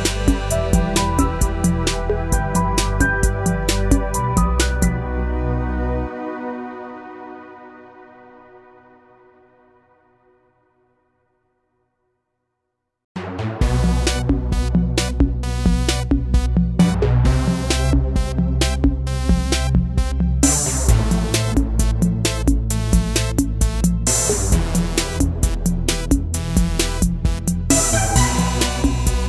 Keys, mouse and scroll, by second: 2.7 click, 4.9 click, 10.5 click, 13.7-16.7 drag, 24.7-29.2 drag.